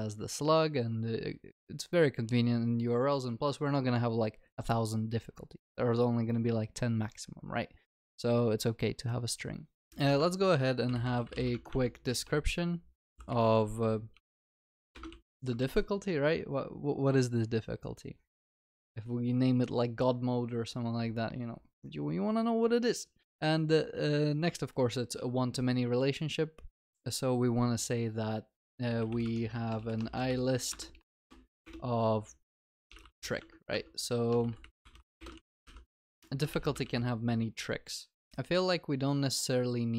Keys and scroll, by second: 10.3 Tab, 15.2 ctrl+s, 15.3 Escape, 15.6 ctrl+s, 29.3 Tab, 35.3 Tab, 35.7 ctrl+s, 36.5 Escape, 36.5 ctrl+y, 36.9 ctrl+s.